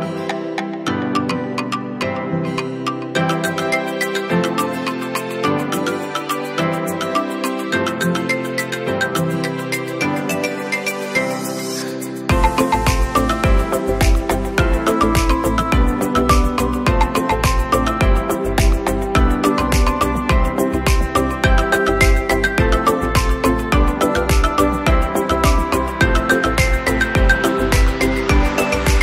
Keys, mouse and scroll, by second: 10.8 scroll up 2, 11.1 scroll down 2, 11.6 space, 11.7 click, 28.2-29.0 alt+shift+drag.